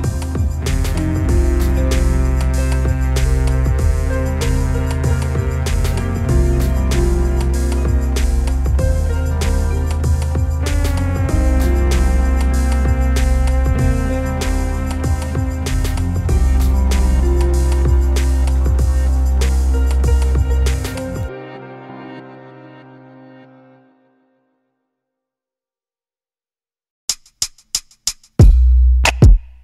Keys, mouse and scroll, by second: 0.2 click, 1.2-7.1 drag, 6.3 scroll down 1, 7.5-7.9 scroll up 1, 8.1 scroll down 1, 8.4 scroll up 1, 10.7 click, 10.9 click, 11.4 click, 11.9 scroll down 1, 12.1 alt+a, 13.0 scroll up 1, 14.5 scroll down 1, 15.1 scroll down 2, 17.1 scroll down 2, 17.3 scroll up 2, 19.9 scroll up 1, 20.5-21.8 drag, 21.9-22.8 scroll down 2, 22.8-23.9 scroll down 1, 23.9 drag, 26.7-28.2 drag, 29.1-29.6 drag.